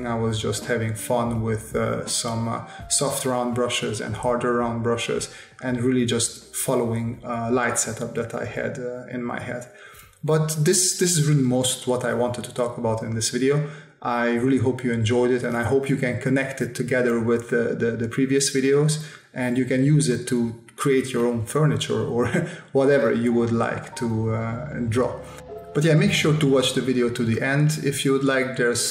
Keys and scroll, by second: 1.0 space, 1.7 space, 3.4 space, 4.0 space, 5.2 space, 6.4 space, 6.9 space, 8.1 space, 9.1 space, 10.4 s, 11.7 s, 12.6 space, 14.0 space, 15.0 s, 15.8 space, 16.2 s, 17.2 space, 18.5 s, 19.7 space, 20.2 space, 21.4 space, 22.4 space, 23.9 s, 24.5 space, 25.2 space, 26.9 s, 28.6 space.